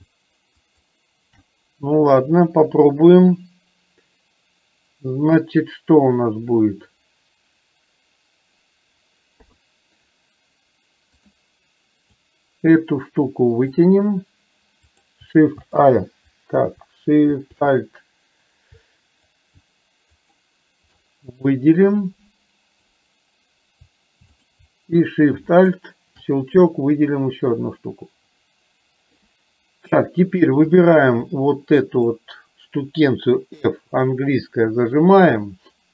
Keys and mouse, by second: 0.7 click, 9.4 KP_3, 12.4-13.9 drag, 20.2 click, 21.5-22.9 drag, 24.5 click, 25.6 click, 27.1-29.4 drag, 30.7 click, 31.4 click.